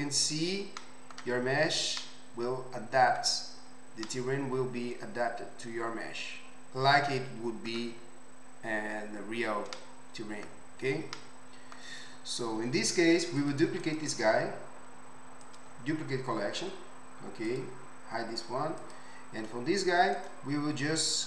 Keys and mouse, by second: 13.4 click, 13.5 middle click, 17.5 click, 18.8 click.